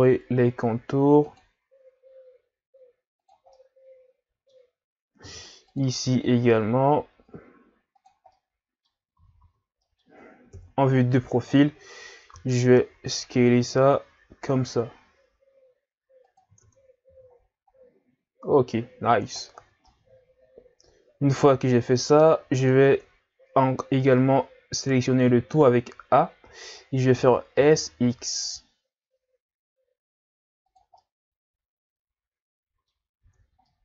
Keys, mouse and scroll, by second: 3.6-5.2 middle drag, 5.2 ctrl+r, 8.3 middle click, 9.2 a, 9.4 a, 9.8 middle click, 10.5 KP_3, 11.6-12.4 scroll up 2, 12.4 s, 16.7 Tab, 17.1 a, 17.4-18.6 scroll down 3, 18.6-19.6 scroll up 4, 19.6 scroll down 1, 19.9-22.4 middle drag, 22.4-22.7 scroll up 1, 22.7 Tab, 24.8 a, 25.1 a, 27.1 s, 31.0-33.2 middle drag, 33.2 Tab, 33.6 middle click.